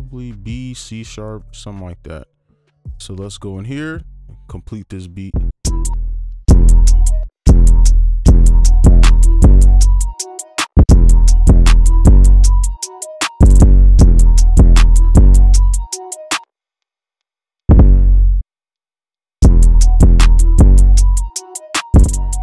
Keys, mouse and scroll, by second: 3.1 right click, 5.6-8.2 typing, 10.6 space, 10.8 space, 13.6 space, 13.8 right click, 13.9 space, 16.4 space, 17.6 double click, 19.4 space, 22.3 space.